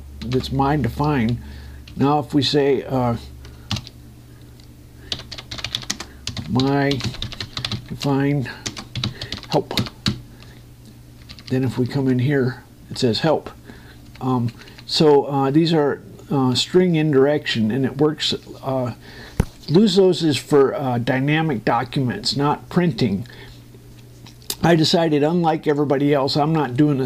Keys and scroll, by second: 0.8 ctrl+t, 1.7 Escape, 2.9 ctrl+Down, 4.4 shift+3, 5.9 d, 6.7 space, 7.2 shift+m, 9.7 shift+l, 10.5 Return, 10.8 Up, 16.9 Down.